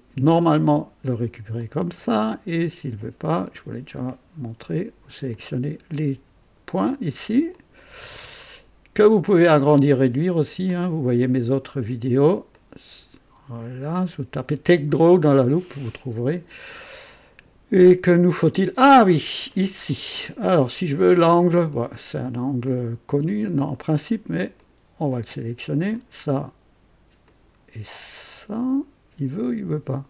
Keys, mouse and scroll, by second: 0.3 click, 1.6 click, 2.0 click, 3.4 click, 5.3 ctrl+click, 7.5 ctrl+click, 10.6 click, 12.5-14.6 drag, 15.2 scroll up 2, 16.3 click, 16.8-18.9 right drag, 18.9 scroll down 2, 19.5 right click, 21.7 click, 24.5 click, 25.9 ctrl+click, 27.3 ctrl+click.